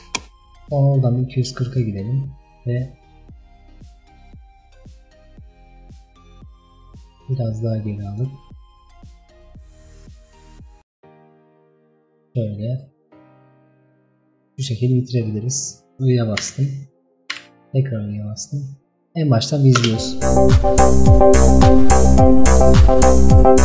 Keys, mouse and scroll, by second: 0.0-4.9 drag, 7.2-16.2 drag, 16.2 i.